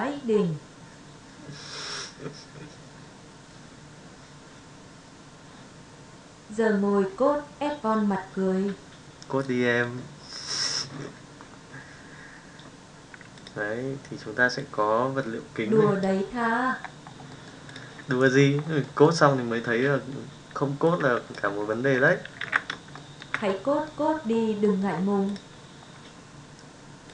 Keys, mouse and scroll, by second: 18.8-19.2 middle drag, 20.9 click, 21.7 middle drag, 22.9-23.3 shift+middle drag, 23.4-23.8 middle drag, 24.6 middle click, 27.0 click.